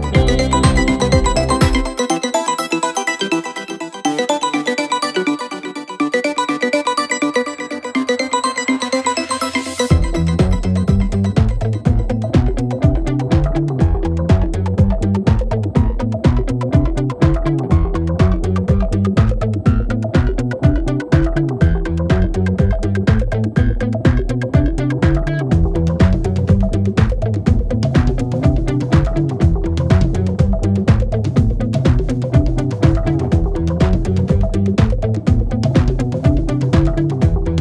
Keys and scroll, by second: 2.7 4, 5.8 ctrl+F1, 14.5 ctrl+F2, 16.8 3, 17.5 ctrl+F2, 20.4 4, 22.6 3, 26.0 4, 26.9 3, 27.2 ], 28.2 Delete, 31.8 ctrl+F1.